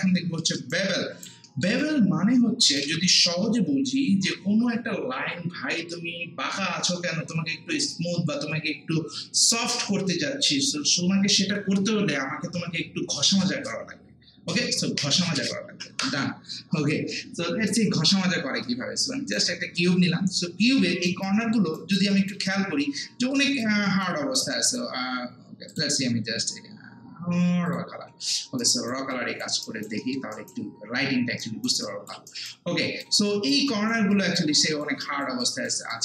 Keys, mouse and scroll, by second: 0.3 scroll up 1, 0.4 alt+middle click, 0.7 alt+right click, 1.5 alt+middle click, 1.8-5.4 alt+right drag, 17.7-19.8 right drag, 19.8 scroll down 1, 20.6 scroll up 1, 20.8 alt+middle click, 21.1 alt+right click, 21.4 alt+middle click, 21.8 alt+right click, 22.1 alt+click, 22.9 scroll down 1, 23.2 scroll up 1, 23.4 alt+click, 23.9 alt+right click, 24.2 alt+click, 24.5 alt+right click, 25.7 click, 28.1 scroll down 1, 28.4 scroll up 1, 28.6 alt+right click, 29.1 alt+click, 29.6 alt+right click, 30.0 alt+middle click, 30.3 alt+right click, 31.8 alt+click, 32.3 alt+right click, 32.8 alt+click, 33.3 alt+right click, 33.7 alt+click, 34.1 alt+right click, 34.6 alt+click, 35.0 alt+right click, 35.4 alt+click, 35.9 alt+right click.